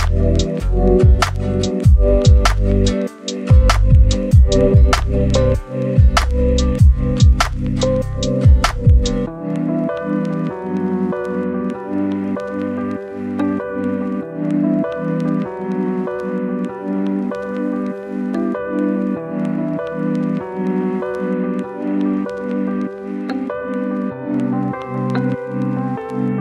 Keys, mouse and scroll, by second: 0.2 scroll down 1, 0.4-0.7 scroll up 1, 0.7 right click, 1.2 scroll up 1, 1.4-3.5 drag, 3.7 scroll down 1, 3.9-4.3 scroll up 1, 4.3-7.2 drag, 7.2 scroll down 1, 7.3 scroll up 1, 7.5 click, 8.6 scroll down 1, 8.7-9.4 scroll up 1, 9.4 click, 9.9 scroll down 1, 10.1-10.9 scroll up 2, 10.4 click, 10.9 click, 18.3 scroll down 1, 18.8-19.3 scroll up 1, 19.3 scroll down 1, 19.5 scroll up 1, 19.8 right click, 20.1 scroll down 1, 20.2-21.0 scroll up 1, 21.3 click, 21.5-22.6 right drag, 22.6 scroll down 1, 22.8 right click, 23.6 scroll down 1, 23.7 scroll up 1, 24.6 click, 24.8-25.1 scroll down 1, 25.7 click, 26.3 scroll down 1.